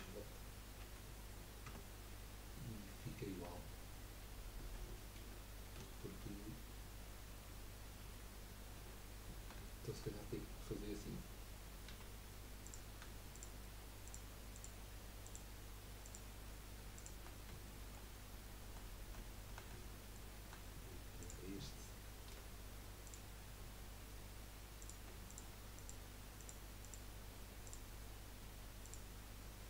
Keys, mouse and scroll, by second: 1.6 Tab, 3.4 Tab, 5.2 ctrl+z, 5.8 ctrl+z, 6.2 ctrl+z, 8.0 ctrl+z, 9.6-11.9 shift+middle drag, 11.9 2, 12.6 click, 13.3 shift+click, 14.0 shift+click, 14.5 shift+click, 15.2 shift+click, 16.0 shift+click, 16.9 click, 17.3 scroll down 2, 17.7-21.2 shift+middle drag, 21.2 click, 22.6 Delete, 24.8 click, 25.3 shift+click, 25.7 shift+click, 26.4 shift+click, 26.8 shift+click, 27.6 shift+click, 28.8 shift+click.